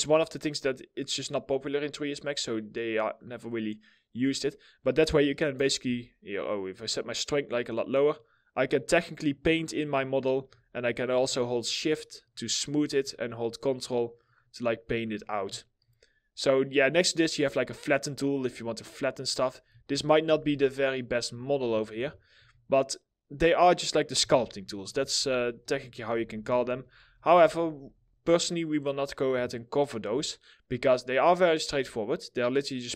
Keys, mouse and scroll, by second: 5.8 ctrl+z, 8.8 double click, 10.4 shift+click, 11.2 shift+double click, 11.5 shift+click, 12.8 ctrl+click, 13.1 ctrl+double click, 13.3 ctrl+click, 19.5 ctrl+z, 21.5 ctrl+z, 22.0 w, 23.9 ctrl+z, 28.9 middle click, 29.4 scroll down 1, 29.9 alt+middle click, 30.4 middle click, 30.4-30.8 alt+scroll down 1, 30.8 middle click.